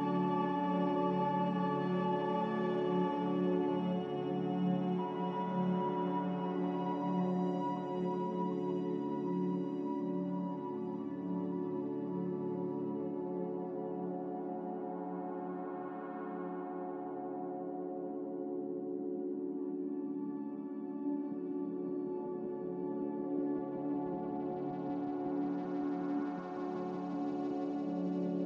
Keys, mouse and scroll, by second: 3.8 click, 4.5 b, 8.6 click, 14.4 click, 15.5 ctrl+z, 17.1-17.9 typing, 27.5 z.